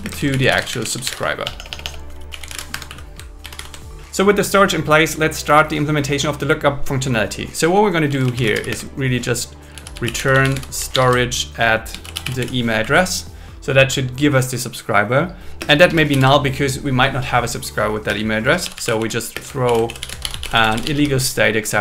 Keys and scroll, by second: 0.0-0.4 typing, 1.4 BackSpace, 2.6 BackSpace, 2.7 Escape, 2.9 Right, 3.4 shift+8, 3.7 shift+9, 8.7 space, 10.9 alt+5, 12.8 Right, 15.6-16.6 typing, 18.0 space, 19.3 space, 19.6 shift+i, 20.0 shift+i, 20.6 shift+s.